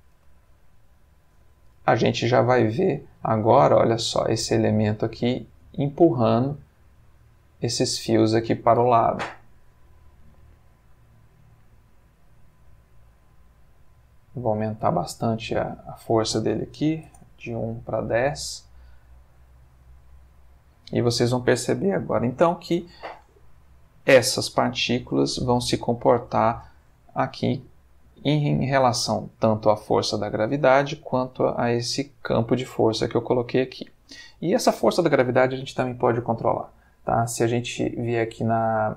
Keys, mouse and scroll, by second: 0.2 space, 4.0 g, 5.2 click, 11.3 click, 12.9 click, 14.6 click, 15.5 click, 16.7 1, 16.9 0, 17.1 Return, 32.0 g, 33.0 click, 38.3 click.